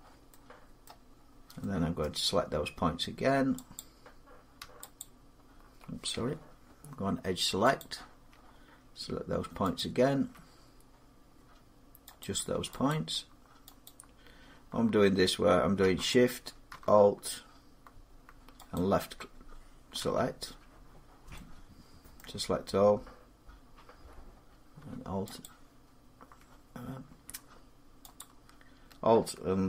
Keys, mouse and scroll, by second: 0.6 middle click, 1.0 scroll up 3, 1.8 middle click, 3.6 click, 4.8 alt+click, 7.6 click, 9.6 click, 12.0 click, 13.6 click, 18.5 click, 22.0 middle click, 25.2 alt+click, 28.0 alt+click.